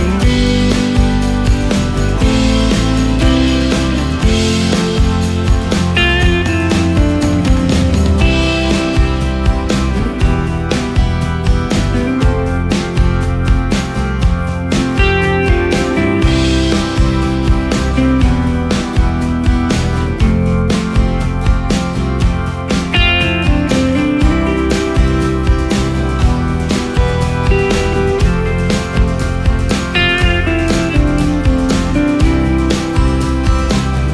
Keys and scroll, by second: 3.4 ctrl+space, 4.2 ctrl+space, 9.5 ctrl+space, 10.6 ctrl+space, 12.1 ctrl+space, 16.9 ctrl+space, 17.6 ctrl+alt+space, 21.1 ctrl+alt+space, 21.9 ctrl+alt+space, 24.3 ctrl+alt+space, 25.9 ctrl+alt+space.